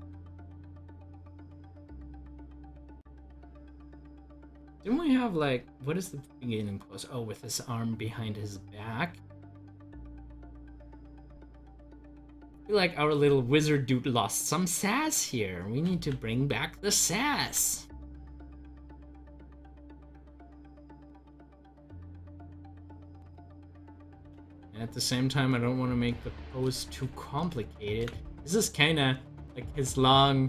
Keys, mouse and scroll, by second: 0.7-2.2 drag, 5.6-13.2 drag, 13.2 ctrl+z, 15.9 ctrl+z, 17.5 z, 18.0-21.1 drag, 21.2 ctrl+z, 24.4 ctrl+z, 26.7 z, 29.0-30.4 drag.